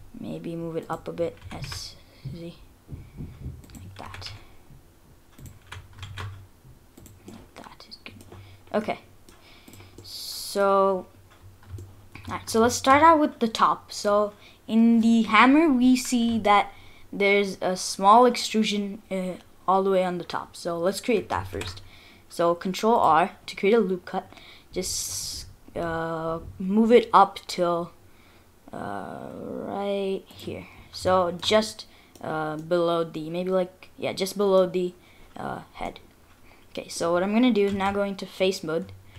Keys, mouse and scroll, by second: 1.4 s, 4.0 g, 5.7 s, 7.3 middle click, 8.5-8.8 scroll up 4, 8.8 middle click, 9.7 click, 10.0 middle click, 10.8-11.3 scroll down 4, 11.1-11.5 scroll up 2, 11.9 shift+middle click, 12.4 middle click, 20.4 scroll up 3, 20.7-21.3 scroll down 3, 21.5 ctrl+r, 30.6-31.1 scroll up 3, 31.1 shift+middle click, 31.6 middle click, 32.3-33.0 scroll down 2, 32.6 middle click, 35.3-35.9 scroll up 4, 35.9 middle click, 36.6 middle click, 37.7 3.